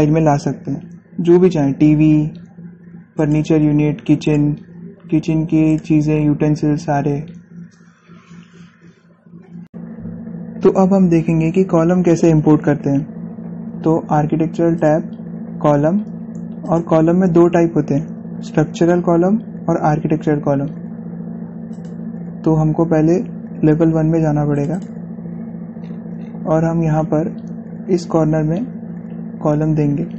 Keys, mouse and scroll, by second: 3.8 click, 15.6 click, 19.7 typing, 22.6 click, 24.8-25.7 typing, 25.4 click, 26.6 scroll down 1, 27.9 typing, 28.4-29.2 scroll up 1.